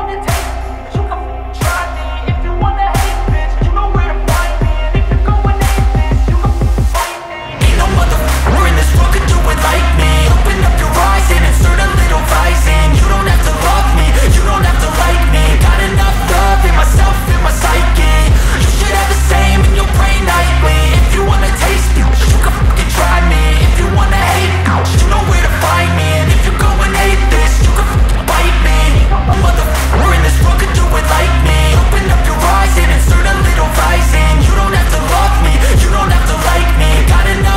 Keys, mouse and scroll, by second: 2.5 scroll down 1, 4.0 click, 5.2-6.0 scroll down 1, 8.6-8.9 scroll up 1, 9.8 click, 11.0 scroll up 1, 12.8-16.2 drag, 18.5-19.5 scroll up 1, 19.9 click, 20.8 ctrl+z, 21.8 click, 24.4 scroll down 1, 26.5-29.0 drag, 30.8 click, 32.6-32.9 scroll up 1, 33.1-37.5 drag.